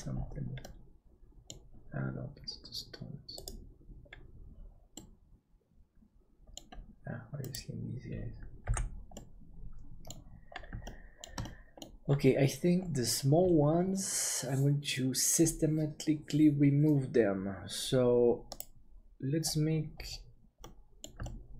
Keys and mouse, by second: 0.6-1.7 middle drag, 5.0-6.6 middle drag, 8.8 h, 9.2 middle click, 10.9 middle click, 11.5 middle click, 20.6 right click, 20.9 middle click, 21.3 shift+middle click.